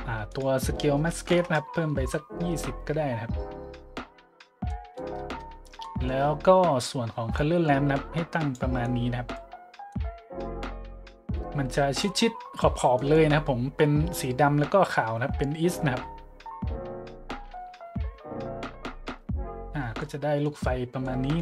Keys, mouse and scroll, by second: 0.3 click, 1.1 KP_2, 1.3 KP_0, 1.4 KP_Enter, 4.7 middle click, 5.1 click, 7.3-8.5 drag, 8.8-9.3 drag, 9.9-12.0 drag, 12.8 middle click, 13.2 middle click, 20.0-20.4 drag, 21.0 click, 21.1 middle drag.